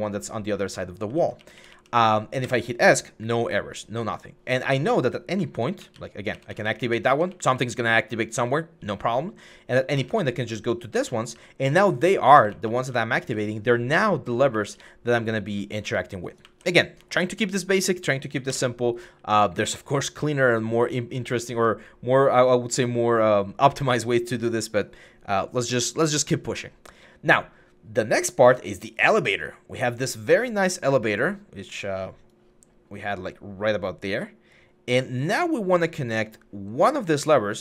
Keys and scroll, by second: 0.0-1.5 typing, 2.3 Escape, 4.4-16.3 typing, 18.3 Escape, 21.3 d, 22.5-23.6 typing, 35.1 s, 37.0 typing.